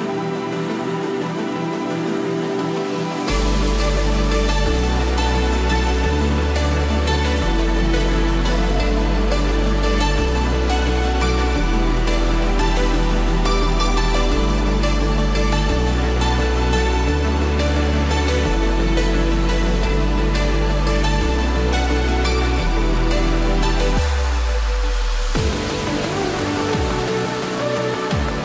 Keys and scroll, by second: 14.9 ctrl+-, 23.0 Return, 24.0 ctrl+-, 24.7 ctrl+=.